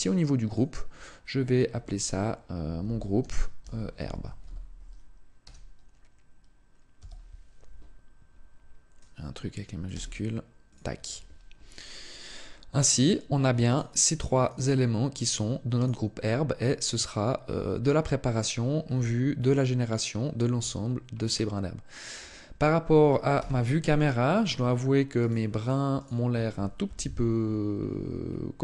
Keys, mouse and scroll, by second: 0.3 click, 12.7 right click, 13.5 right click, 14.3 right click, 15.6 right click, 16.8 click, 18.6 scroll down 1, 19.3-20.3 scroll up 1, 20.3 scroll down 1, 20.9 scroll up 1, 22.0 scroll down 1, 22.5 middle click, 23.1 KP_0, 25.0 right click, 25.4 right click, 25.7 right click, 26.6 KP_7, 27.5-28.3 scroll up 6.